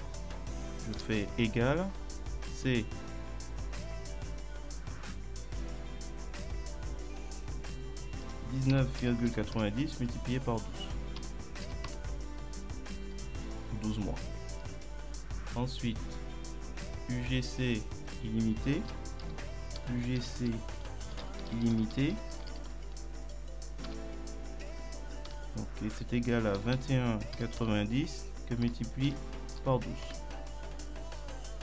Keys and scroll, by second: 1.0 =, 8.2 1, 9.0 ., 9.3 9, 11.2 BackSpace, 11.7 2, 11.9 Return, 19.2-22.7 typing, 23.9 Return, 25.3 =, 26.6 2, 27.4 ., 27.6 9, 30.1 Return.